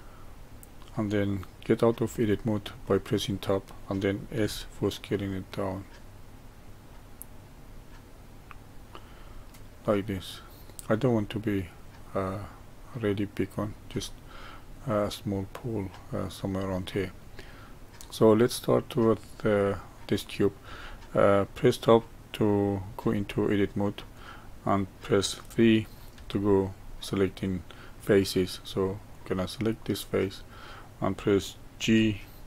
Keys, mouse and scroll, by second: 0.2-1.3 scroll up 1, 2.0 Tab, 2.8-4.4 middle drag, 4.4 s, 9.3-12.3 middle drag, 14.0-22.9 middle drag, 18.9-19.7 scroll up 2, 23.0 Tab, 24.1 click, 26.1 3, 29.1 click, 29.8-31.8 middle drag, 31.8 g.